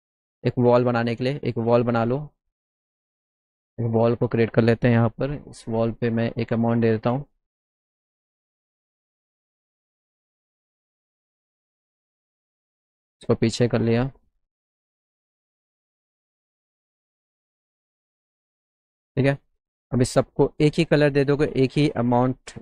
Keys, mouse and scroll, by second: 0.8-2.5 drag, 2.7 right click, 3.9 click, 4.4 click, 5.2 e, 6.1 click, 7.5 middle click, 7.9 click, 8.3 p, 9.4 middle click, 10.5 alt+middle click, 11.5 middle click, 12.4-15.3 drag, 12.4 right click, 15.9 click, 17.1 middle click, 17.7 alt+middle click, 18.5 alt+middle click, 19.6 scroll up 2, 20.0 middle click, 20.5 click, 21.9 click.